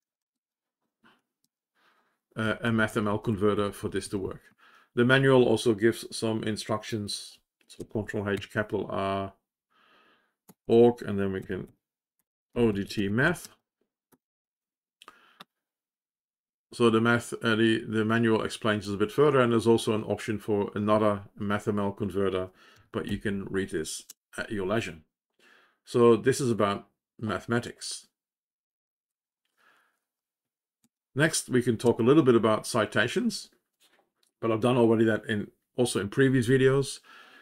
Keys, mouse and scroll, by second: 3.5 Down, 9.2 ctrl+r, 11.1-14.0 typing.